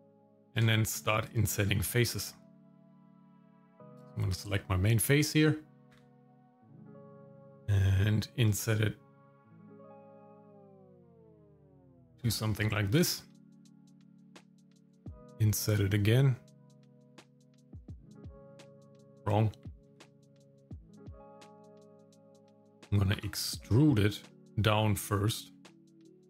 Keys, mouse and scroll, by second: 0.7 shift+middle click, 1.3 shift+middle click, 1.8 shift+middle click, 4.3 click, 5.9 i, 12.1 shift+middle click, 13.0-14.8 scroll up 1, 14.8 i, 19.9 ctrl+z, 21.3 ctrl+shift+z, 23.2 e.